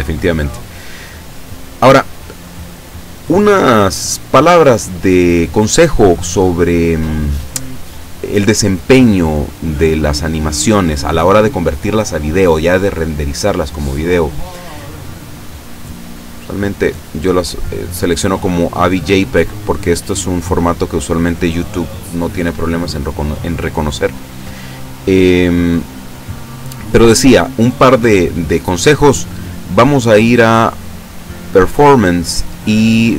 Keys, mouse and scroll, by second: 2.7 click, 4.4-5.4 scroll down 2, 17.0 click, 26.8 scroll down 1, 30.5 click, 30.8-31.5 scroll down 2.